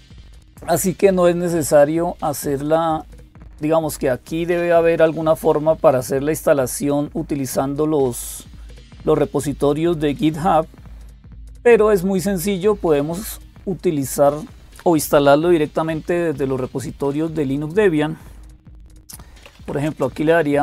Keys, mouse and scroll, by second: 0.0-20.6 typing, 2.7 click, 13.1 click.